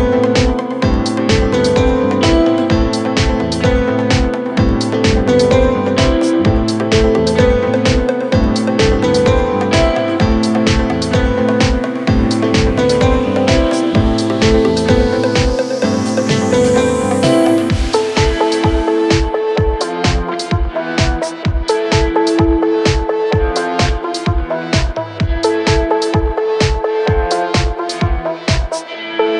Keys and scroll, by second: 2.2 ctrl+z, 8.7 Escape, 15.3 f, 16.2 f, 26.0 Escape, 28.9 Escape.